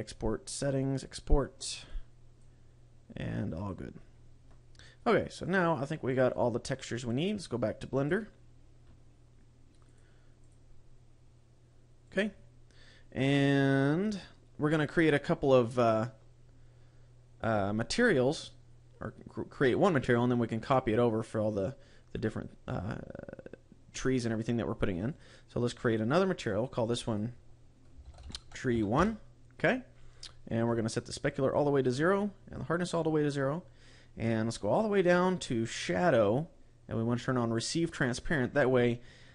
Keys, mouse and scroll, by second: 19.1 click, 20.6 click, 25.0 click, 25.7 click, 26.4 click, 26.9 click, 31.0 click, 32.4 click, 33.8-35.7 scroll down 13, 35.7 click, 35.7-36.6 scroll down 5, 37.6 click.